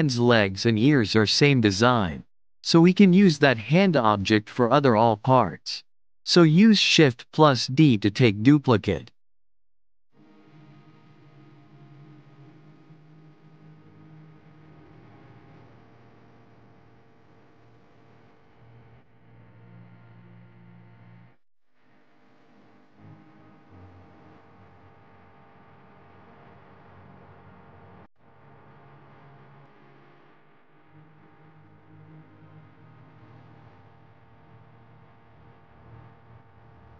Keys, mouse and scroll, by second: 0.0 shift+click, 0.7 ctrl+j, 1.3 click, 2.0 click, 3.3 g, 5.0 ctrl+z, 6.5 shift+d, 10.0 r, 12.8 click, 14.9 middle click, 15.8 KP_1, 16.5 scroll up 1, 16.5-16.8 shift+middle drag, 16.8 click, 17.4 shift+d, 18.2 click, 19.1 alt+z, 19.8 r, 22.0 click, 23.0 r, 24.2 click, 24.9 click, 25.7 r, 26.5 click, 27.9 click, 28.9 r, 32.1 click, 35.1 click.